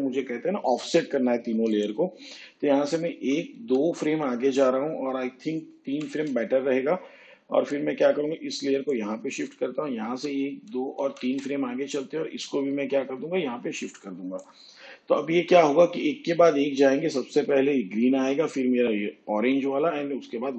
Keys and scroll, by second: 3.1 ctrl+Right, 5.8 ctrl+Right, 10.0 ctrl+Right.